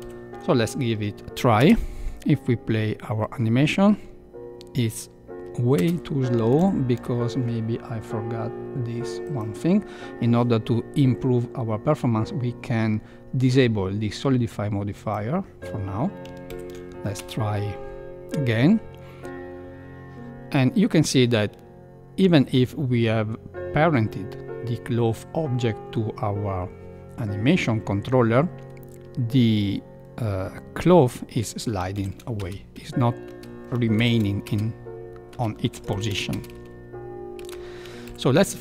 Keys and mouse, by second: 0.2 shift+Left, 1.5 space, 6.3 space, 6.6 shift+Left, 9.2 click, 15.0 click, 17.2 space, 29.5 space, 32.0 shift+Left, 32.3 space, 33.3 space, 34.0 shift+Left, 34.4 space, 35.9 shift+Left, 36.3 space, 37.4 space, 38.0 shift+Left.